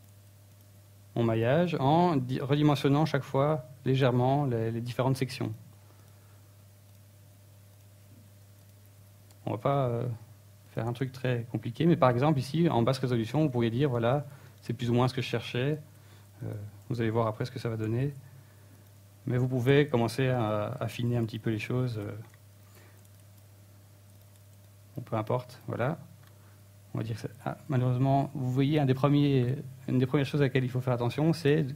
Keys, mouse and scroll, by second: 2.6 click, 2.8 s, 3.4 e, 4.8 click, 5.0 e, 5.6 s, 6.3 e, 7.1 click, 7.7 e, 9.0 click, 9.2 s, 11.2 click, 11.3-14.3 typing, 11.7 click, 12.6 click, 13.4 click, 14.3 click, 16.4 click, 16.5 Tab, 16.7 middle click, 18.6 middle click, 18.8 Tab, 19.4 alt+right click, 19.9 alt+shift+right click, 20.5 middle click, 21.8 KP_1, 22.4 scroll up 1, 22.8 KP_3, 23.5 g, 24.3 click, 24.9 ctrl+z, 25.4 g, 26.1 click, 26.1 a, 26.3 b, 26.9 g, 27.4 click, 27.9 scroll down 2, 28.0 scroll up 2, 28.3-30.4 typing, 29.6 click, 31.0 click, 31.2 scroll down 2, 31.6 scroll up 3.